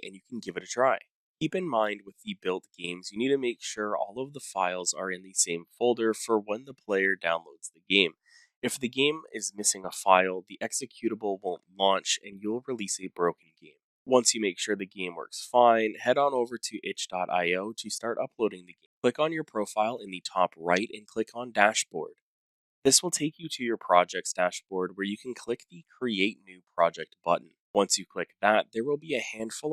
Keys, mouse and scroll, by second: 0.0-15.7 typing, 16.2 click, 18.5 click, 20.4 click, 21.7 click, 24.4 click, 28.4 click, 29.3-29.7 typing.